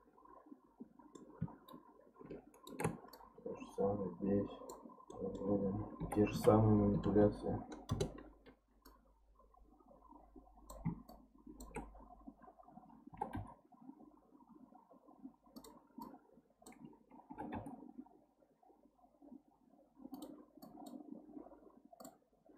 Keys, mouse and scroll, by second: 1.7-3.1 shift+right drag, 3.1 click, 5.1 middle click, 6.0 r, 8.8 click, 11.1 shift+click, 13.1 g, 16.0 click, 17.3 g, 20.6 click, 22.0 click.